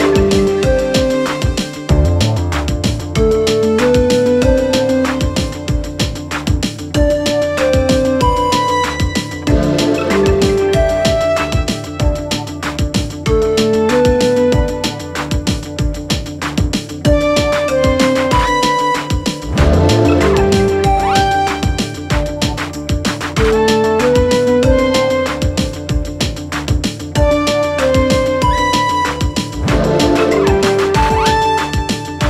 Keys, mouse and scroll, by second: 0.1 g, 1.9 click, 2.5 click, 3.4 click, 4.0 g, 9.7 click, 10.8 s, 12.5-12.9 scroll up 2, 12.9 s, 15.8 click, 16.3 click, 17.5 scroll up 1, 17.7 click, 18.3 Tab, 18.4 click, 19.1-19.7 scroll up 2, 19.7 click, 20.7 i, 26.6 ctrl+z, 27.5 e, 29.7 ctrl+z, 29.8 click, 30.0 click, 30.7 click, 32.0 e.